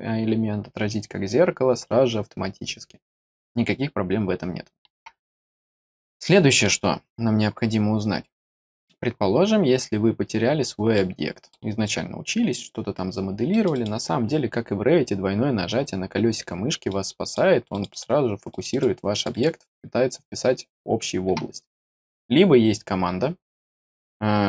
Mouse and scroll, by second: 6.2 middle click, 8.7-10.3 scroll down 4, 10.9 middle click, 12.0-12.5 scroll down 2, 13.5 middle click, 13.7 middle click, 15.0-16.8 scroll down 8, 16.8 middle click, 17.7 middle click, 17.9 middle click, 18.5 middle click, 18.7 middle click, 19.1 middle click, 19.3 middle click, 21.7 scroll down 2, 21.9 middle click, 22.2 middle click, 22.7 middle click.